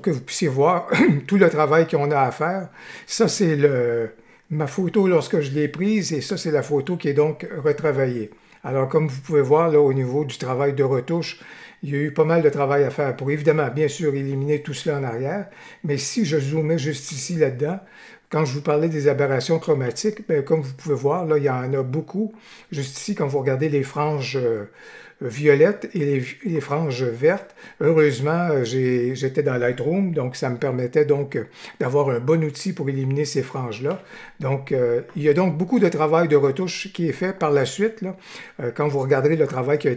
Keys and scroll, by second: 33.8 y.